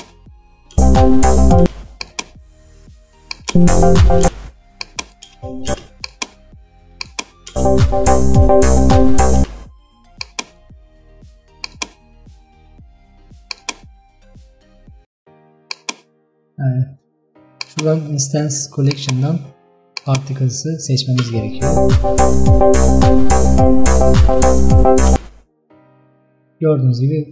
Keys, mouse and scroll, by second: 0.0 click, 0.8 space, 1.7 space, 3.4 click, 3.6 space, 4.3 space, 4.9 click, 5.4 space, 5.8 space, 7.1 click, 7.6 space, 9.5 space, 10.2-21.3 drag, 21.3 space, 25.2 space.